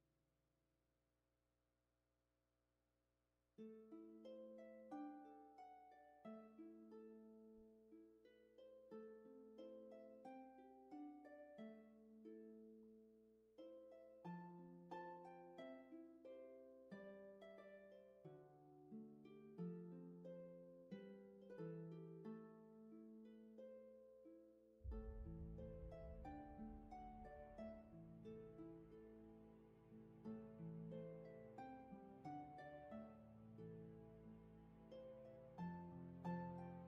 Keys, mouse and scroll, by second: 10.2 scroll down 1, 11.5 scroll up 1, 12.6 space, 25.3 ctrl+z, 29.6 scroll up 1, 29.7-31.0 scroll down 1, 31.0-31.4 scroll up 1, 31.4 space, 32.2-33.6 scroll up 1.